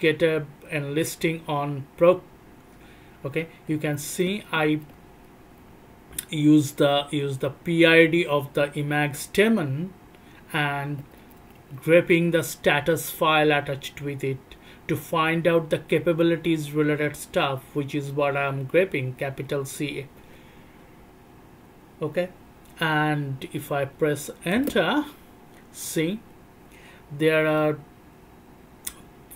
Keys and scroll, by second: 3.9 alt+o, 3.9-5.9 typing, 4.9 alt+o, 5.5 alt+o, 5.7 alt+o, 5.9 alt+o, 11.2 alt+o, 11.2 c, 11.4 alt+o, 11.4 c, 11.9 alt+o, 11.9 c, 22.9 alt+o, 22.9 c, 23.1 alt+o, 23.1 c, 23.6 alt+o, 23.6 shift+c, 24.5 Return.